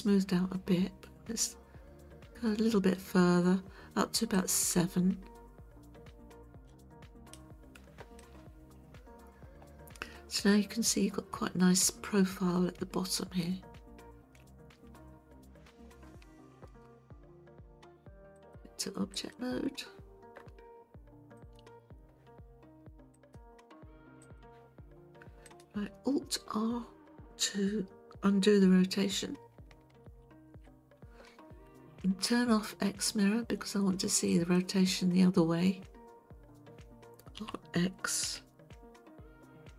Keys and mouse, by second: 4.3-7.4 drag, 8.2-11.8 middle drag, 16.1 KP_1, 18.5 click, 21.4 click, 23.1-24.4 drag, 30.1 alt+r, 34.3 click, 37.4 r, 38.3 x.